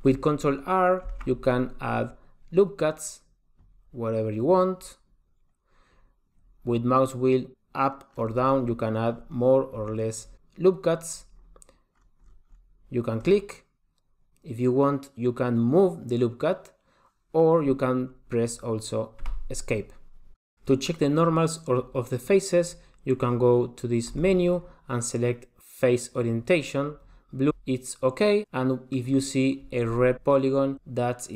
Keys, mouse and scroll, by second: 1.3 ctrl+r, 24.1 click, 27.7 middle click.